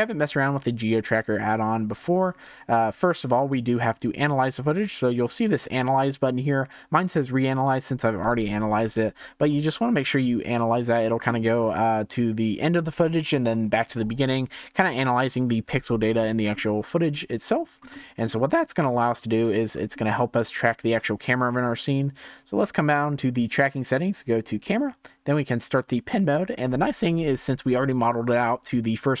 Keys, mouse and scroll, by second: 15.0-16.0 scroll up 1, 16.0 scroll up 1, 16.1-17.4 shift+middle drag, 17.4-17.9 scroll up 1, 17.9-19.4 shift+middle drag, 19.4-19.8 scroll down 1, 19.8-24.6 shift+middle drag, 24.6-29.2 drag.